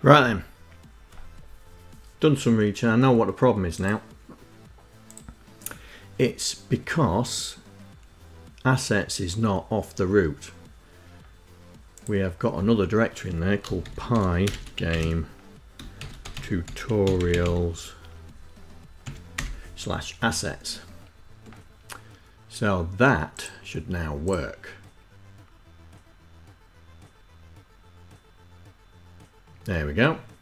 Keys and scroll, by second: 13.2-17.6 typing, 18.7 s.